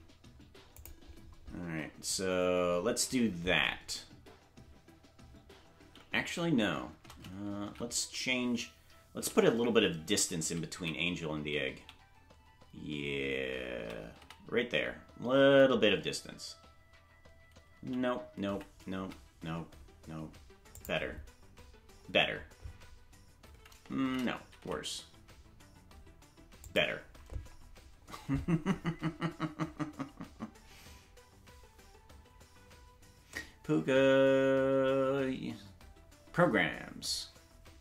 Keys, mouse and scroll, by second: 0.7 click, 6.9 shift+`, 24.0 shift+`.